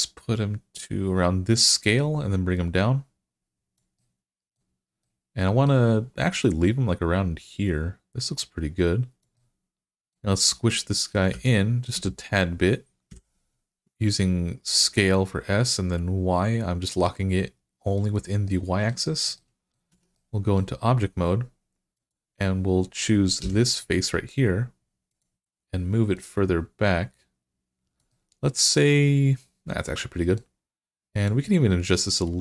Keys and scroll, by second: 11.1 s, 11.7 x, 12.9 y, 19.7 Tab, 23.2 3.